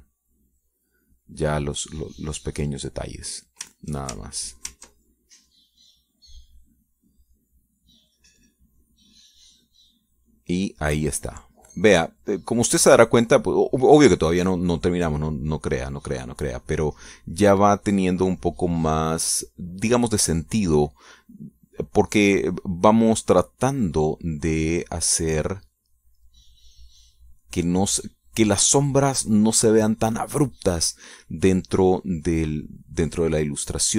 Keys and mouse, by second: 4.2 click, 4.7 ctrl+click, 5.2 ctrl+click, 5.7 ctrl+click, 6.0-9.9 ctrl+drag, 10.1-12.8 drag, 12.9-16.3 drag, 16.5-25.2 drag, 25.6-31.2 drag, 31.9-33.0 middle drag, 33.4-33.9 drag.